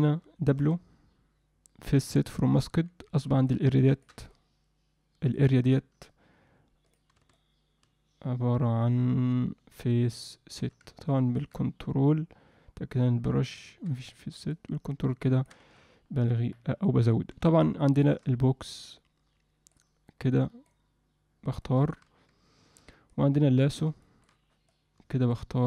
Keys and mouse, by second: 0.5 w, 3.1 middle click, 3.9 ctrl+middle click, 4.3-5.3 shift+drag, 7.3-10.6 shift+drag, 11.1 ctrl+click, 13.4 click, 14.5-15.5 ctrl+drag, 16.5 middle click, 17.9 shift+middle click, 18.9 click, 20.3 click, 21.6 alt+middle click, 23.1 click, 24.0 alt+shift+middle click, 24.7 click.